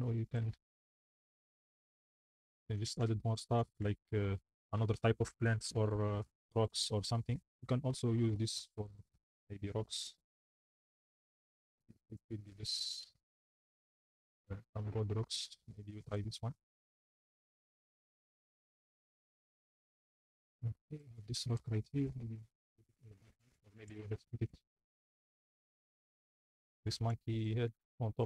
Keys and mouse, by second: 0.0-3.9 typing, 6.3 drag, 8.2 click, 8.8-11.2 drag, 12.1 click, 16.0 click, 21.2-25.6 typing, 26.8-28.2 typing.